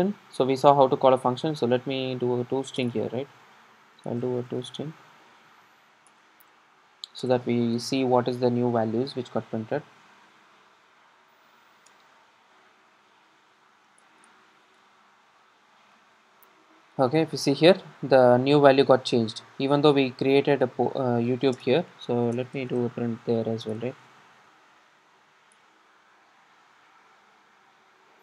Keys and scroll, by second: 8.8 super+r, 14.1 alt+Return, 25.6 Return, 27.1 Return, 27.2 super+r.